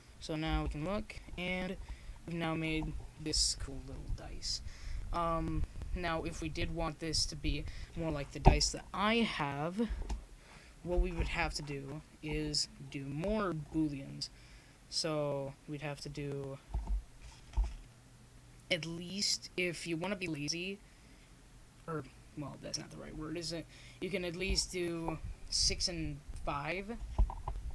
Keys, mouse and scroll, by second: 0.1-1.3 drag, 1.1 shift+d, 1.8 click, 4.2 ,, 6.1 m, 9.0 click, 9.9-11.4 middle drag, 11.4 right click, 12.0 Tab, 14.3-19.4 drag, 19.4-20.5 middle drag, 21.1-23.0 drag, 23.0 middle click, 24.5-26.3 drag.